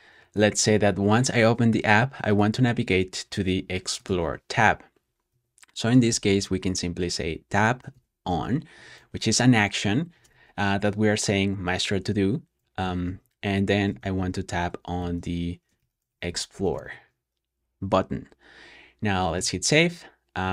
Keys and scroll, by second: 5.0-6.8 typing, 7.8 shift+o, 8.2 n, 8.7 shift+;, 13.8-17.3 typing, 19.3 super+s, 20.4 super+j.